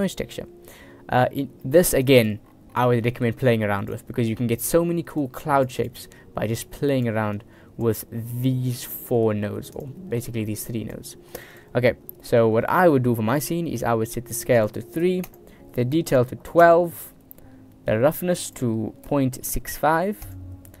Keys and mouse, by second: 1.7 click, 2.1 click, 3.2 click, 5.3 click, 5.9-7.1 drag, 7.5 click, 8.5-9.2 drag, 9.8 click, 10.3-11.0 drag, 11.6-15.3 drag, 16.2 click, 18.5-20.4 drag.